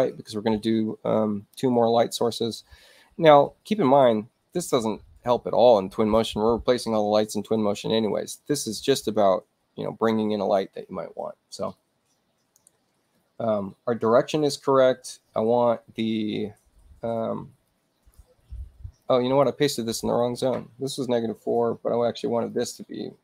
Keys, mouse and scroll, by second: 13.1-15.0 drag, 17.6 click, 19.0 click, 21.4 4, 22.4 click.